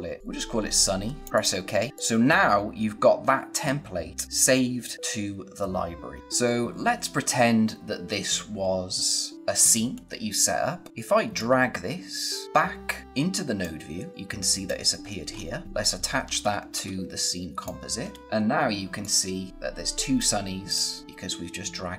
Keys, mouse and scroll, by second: 6.2 scroll down 1, 6.6 scroll up 1, 11.3 click, 14.9-15.2 scroll down 1, 15.3 scroll up 1, 15.6 click, 15.9 space, 17.9 scroll down 1, 18.0 space, 18.2 click.